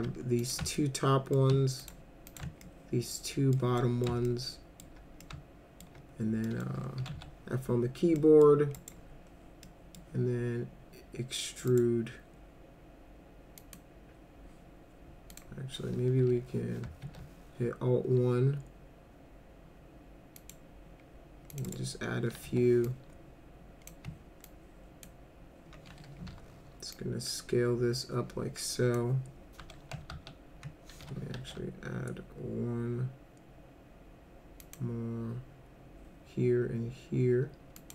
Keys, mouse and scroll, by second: 0.4 ctrl+click, 0.8 alt+middle click, 1.8 ctrl+click, 2.3 ctrl+click, 2.6 alt+middle click, 3.8 middle click, 4.3 alt+middle click, 5.2 alt+middle click, 6.4 middle click, 6.8-7.6 typing, 8.2 middle click, 8.8 right click, 9.7 middle click, 11.7 right click, 13.6 click, 15.3 click, 16.2 1, 17.0 alt+1, 20.4 click, 21.5 click, 21.7 right click, 22.4 1, 22.8-23.9 drag, 24.4 ctrl+click, 26.3 r, 26.9-29.0 drag, 30.1 ctrl+z, 31.3 alt+1, 34.6 click, 37.8 click.